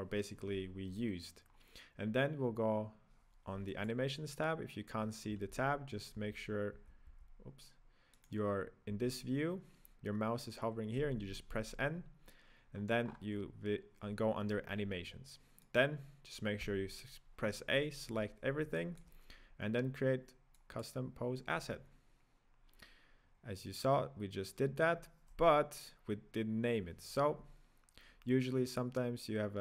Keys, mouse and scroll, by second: 1.6-3.7 scroll up 2, 3.7 click, 5.4 n, 6.2 n, 8.5 right drag, 9.0 n, 11.0 n, 12.8 scroll down 1, 13.1-15.7 scroll up 1, 15.7 right click, 16.9 a, 18.8-20.6 shift+middle drag, 20.6-23.6 drag, 23.6-26.7 scroll down 2, 28.7-29.6 drag.